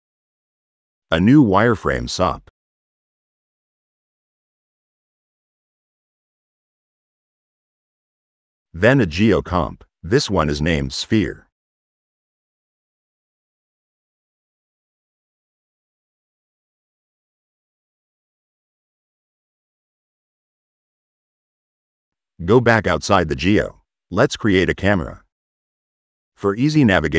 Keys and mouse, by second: 1.9 drag, 3.5 click, 4.9-6.1 middle drag, 8.5 right click, 9.1 e, 9.4 click, 10.4 click, 10.7 click, 13.4 click, 14.0 middle click, 15.0 middle click, 15.8 click, 17.8 middle click, 18.6 click, 19.2 click, 20.0 middle click, 20.7 click, 21.2 click, 21.5 click, 25.2-25.8 drag, 26.1 click.